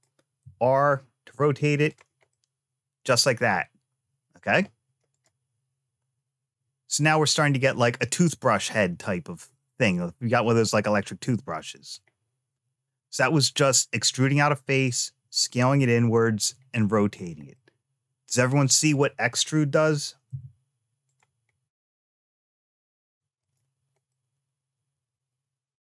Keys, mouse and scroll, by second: 0.2 r, 2.1-4.3 middle drag, 4.9 click, 10.5-11.7 middle drag, 16.7 click, 17.3 middle click, 18.7 click, 20.0 e, 22.3 shift+middle click, 23.1 click, 23.8-25.9 middle drag.